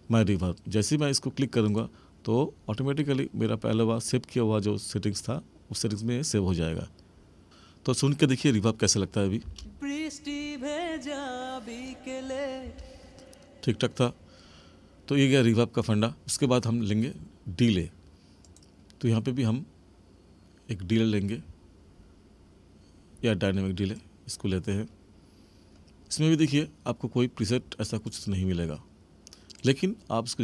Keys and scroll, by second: 9.4 space, 12.5 space.